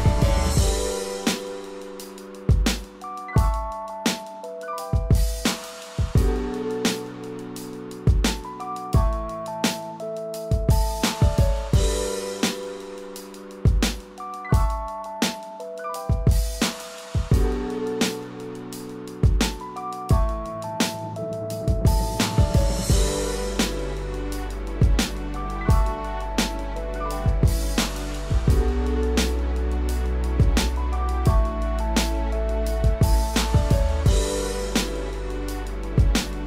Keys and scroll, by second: 2.7 ctrl+-, 3.8 ctrl+=, 18.3 ctrl+z, 19.0 ctrl+z, 27.8 ctrl+z.